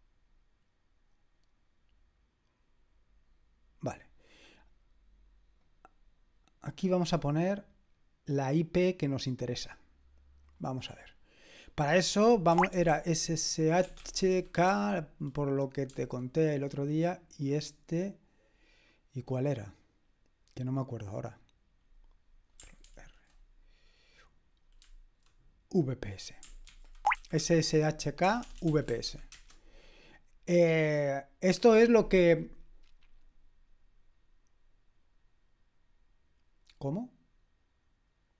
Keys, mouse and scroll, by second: 5.6-6.6 drag, 10.5 click, 11.8 click, 12.3-15.2 typing, 22.9 ctrl+r, 26.7 ctrl+c, 26.9-29.5 typing.